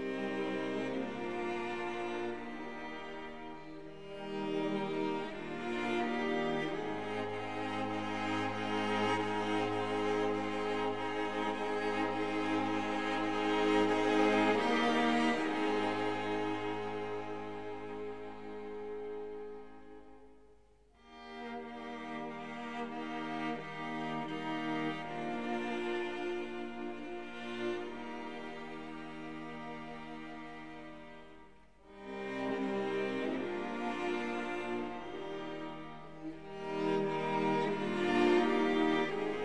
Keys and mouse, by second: 1.0 a, 1.8 e, 2.8 click, 4.3-5.9 drag, 10.3 e, 11.1 click, 12.6-14.2 drag, 15.0 e, 15.5 click, 16.3-17.7 drag, 18.5 s, 19.0 click, 20.0-22.7 drag, 24.0 e, 24.7 click, 25.6-27.9 drag, 30.4 e, 31.0 click, 31.6 s, 32.3 click, 33.7-36.3 drag, 37.7 e, 38.2 click.